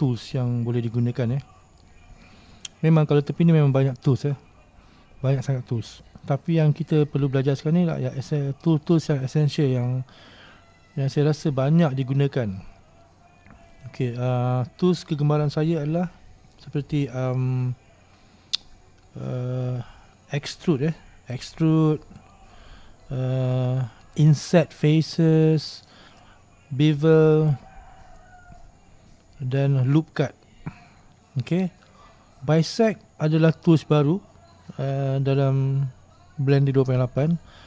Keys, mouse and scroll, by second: 0.2-0.6 scroll up 1, 0.6-1.1 scroll down 2, 1.1-11.4 middle drag, 11.4-13.2 scroll up 1, 13.2-13.8 scroll down 1, 13.8-14.4 scroll up 2, 14.4-15.4 scroll down 1, 15.4-22.3 middle drag, 22.3-37.6 drag.